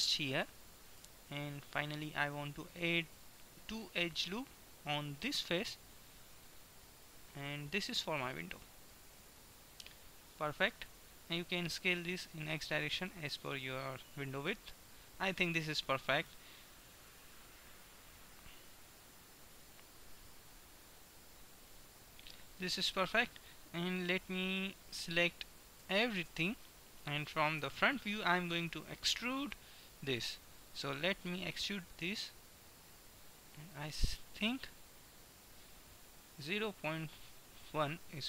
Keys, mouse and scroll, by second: 1.2 a, 2.4 ctrl+r, 9.5-11.5 middle drag, 11.5 s, 17.0 Tab, 24.0 Tab, 26.0 a, 26.4 a, 27.5 KP_1, 31.4 e.